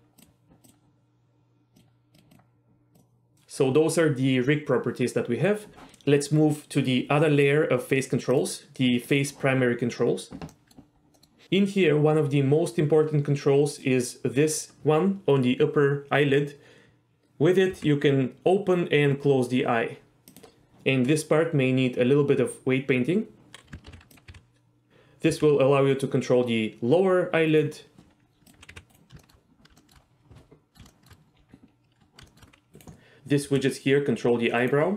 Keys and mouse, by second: 0.2 click, 8.3 click, 10.5 middle click, 11.1 middle click, 13.7 click, 17.7 g, 20.3 click, 23.9 alt+g, 24.9 g, 25.3 g, 27.5-27.9 right drag, 28.5 click, 28.7 g, 28.9 right drag, 29.2 shift+middle click, 29.8 shift+middle drag, 30.6 middle click, 30.9 shift+middle drag, 32.3 shift+middle click, 32.7 g, 33.4 g, 34.6 right drag.